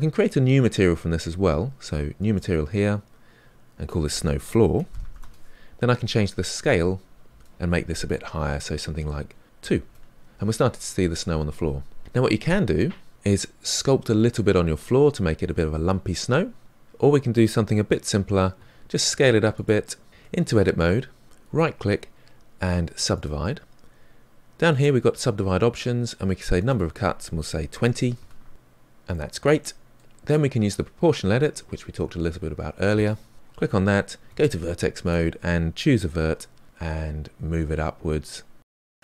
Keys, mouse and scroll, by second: 0.7-2.1 scroll up 1, 2.1 scroll up 1, 2.3-5.2 drag, 5.2 o, 13.1-18.6 middle drag, 18.6 s, 20.1 Tab, 23.2-28.2 right drag, 28.2 click, 29.2-33.3 middle drag, 33.3 click, 34.2 1, 35.1-36.2 drag, 36.2 g.